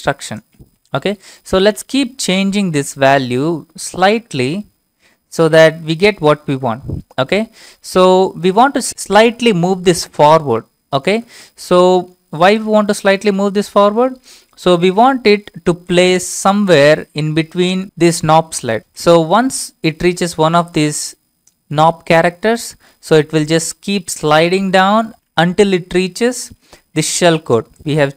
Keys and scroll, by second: 1.4 Up, 2.2 Left, 2.7-3.4 Left, 4.2 Right, 4.4 Right, 6.1 BackSpace, 10.1 f, 11.2 alt+Tab.